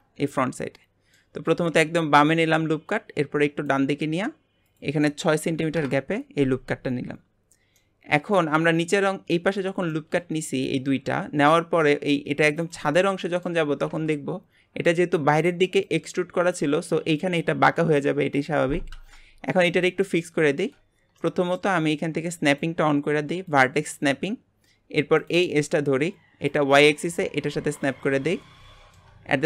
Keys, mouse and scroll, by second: 0.4-2.6 middle drag, 2.6 click, 4.7-7.8 drag, 7.8-11.1 middle drag, 11.1 scroll up 1, 11.5-12.6 middle drag, 12.6 click, 13.0-19.2 middle drag, 19.5-22.5 middle drag, 22.5-24.8 drag, 24.8 scroll up 2, 25.2 click, 26.5-28.0 drag, 28.0 scroll down 2, 28.3 shift+middle click, 29.3-29.4 scroll up 1.